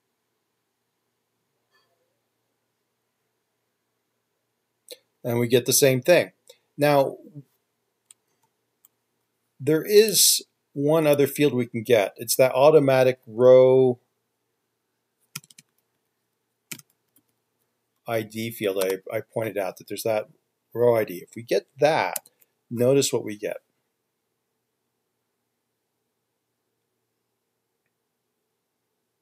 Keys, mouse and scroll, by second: 8.6 ctrl+z, 13.5 typing, 15.6-16.1 typing, 17.2-19.5 typing, 22.4 ctrl+F5.